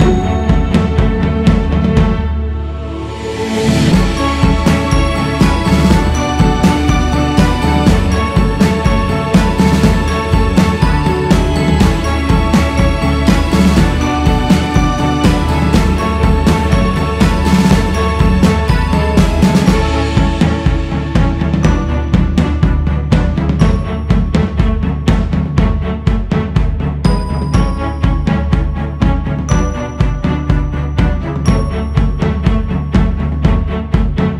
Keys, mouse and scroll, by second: 1.2-2.2 scroll down 4, 2.4 click, 3.2-4.9 scroll up 3, 4.9-5.7 scroll down 4, 5.7 click, 6.3-7.6 scroll up 6, 8.5-10.6 drag, 10.6 x, 11.0 scroll up 1, 12.1 q, 13.1-14.2 drag, 14.2 shift+s, 14.5 f, 16.6-19.6 drag, 21.1-25.0 drag, 25.0-25.9 scroll down 4, 25.9-26.2 scroll down 2, 26.7 click, 27.6-28.0 scroll up 3, 28.0 click, 28.9-29.3 scroll down 2, 29.3 click, 30.5 click, 33.2-33.6 scroll up 2, 33.6 q.